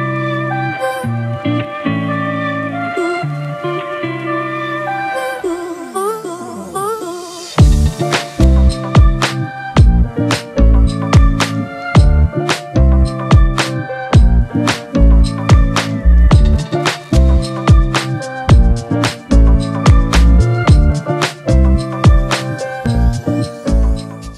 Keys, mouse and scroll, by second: 3.4 alt+scroll up 1.